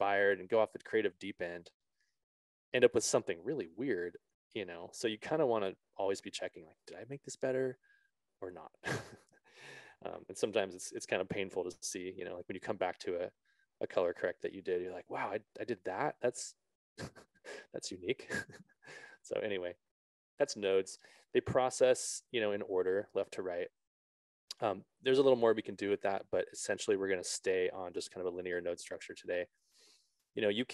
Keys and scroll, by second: 25.8 BackSpace.